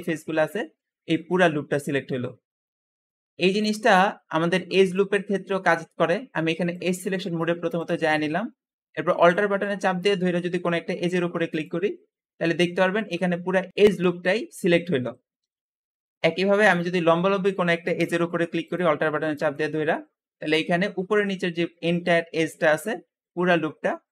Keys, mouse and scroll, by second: 0.8-1.3 scroll down 3, 2.0-2.9 scroll up 2, 2.9-4.2 scroll down 1, 4.6-7.7 drag, 8.0-8.7 scroll up 1, 8.7-9.2 scroll up 1, 9.2-11.3 middle drag, 11.3 alt+click, 11.8-13.7 scroll down 3, 13.7-14.9 scroll down 1, 15.2 Escape, 15.5-17.1 scroll up 2, 18.5 alt+click, 19.2 alt+click, 19.8-20.2 scroll down 2, 20.3 `, 20.5 `.